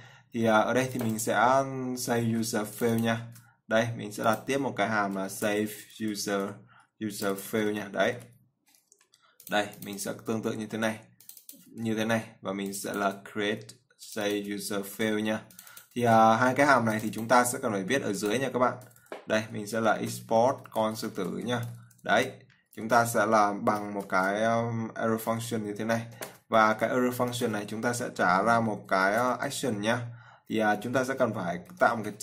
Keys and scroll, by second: 2.6 ctrl+c, 3.6 ctrl+v, 11.0 ctrl+c, 12.0 ctrl+v, 15.3 ctrl+c, 16.3 ctrl+v, 22.4 ctrl+v.